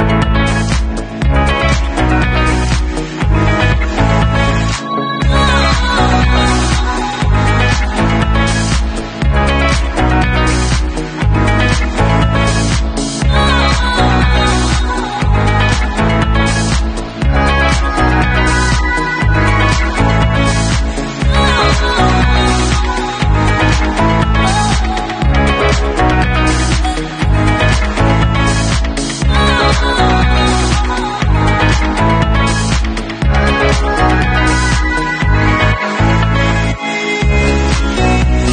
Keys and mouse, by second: 0.1 w, 0.8-2.0 middle drag, 2.0-3.3 drag, 3.3-5.5 middle drag, 6.0-7.7 middle drag, 7.7 click, 8.1-8.6 middle drag, 8.1 e, 8.6-19.9 drag, 10.0 r, 11.1 w, 12.9 ctrl+s, 19.9-24.7 middle drag, 24.7-27.4 alt+drag, 27.4-29.1 middle drag, 28.0 ctrl+shift+f, 29.1 shift+right click, 29.3-30.8 middle drag, 30.3-36.3 drag, 31.0 ctrl+shift+f, 36.3-37.1 middle drag, 37.1-38.5 alt+drag.